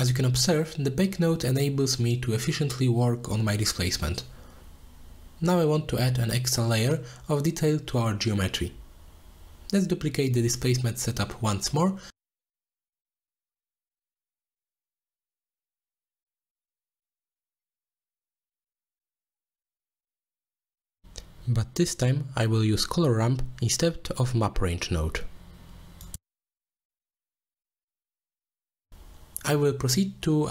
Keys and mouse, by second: 1.9 middle click, 4.3 middle click, 5.6 click, 8.8 middle drag, 11.1 middle click, 11.7-12.0 middle drag, 13.6 click, 13.9 shift+d, 14.7 click, 15.6 middle click, 16.2-18.5 drag, 19.4 click, 20.0 middle drag, 20.5 middle click, 21.4 click, 22.7 ctrl+x, 23.0-27.1 drag, 24.8 r, 27.2 drag, 27.4 middle click, 28.0 middle click, 28.3-29.6 middle drag.